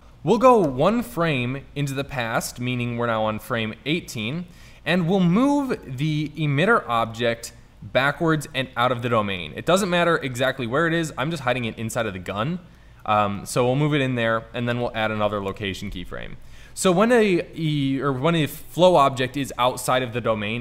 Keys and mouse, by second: 0.8 Left, 5.1 middle drag, 6.9 middle drag, 9.1 g, 13.1 middle click, 14.9 i.